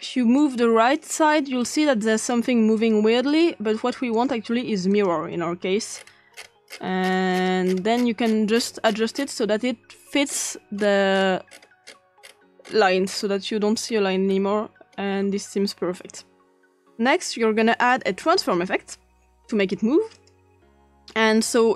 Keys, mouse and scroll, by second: 0.3 click, 1.1 click, 1.6 click, 2.1 click, 2.8 click, 3.3 click, 4.1 click, 4.9 click, 5.9-7.6 scroll up 4, 7.6 scroll down 1, 7.6 typing, 7.7-9.2 scroll up 5, 10.2 scroll up 1, 10.8-13.8 scroll up 4, 13.8-15.4 scroll up 1, 17.9 click, 18.9 click, 20.2-21.5 drag.